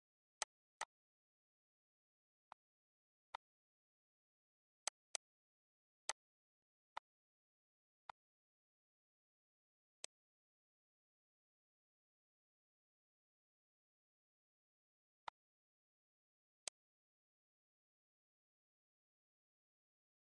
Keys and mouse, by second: 0.3 click, 2.4 click, 3.2 click, 4.8 click, 5.9 click, 8.0 shift+click, 9.1 click, 9.7 click, 10.9 click, 11.5 click, 13.7 click, 14.3 click, 15.2 click, 16.6 click, 17.0 ctrl+s, 19.4 click, 19.8 click.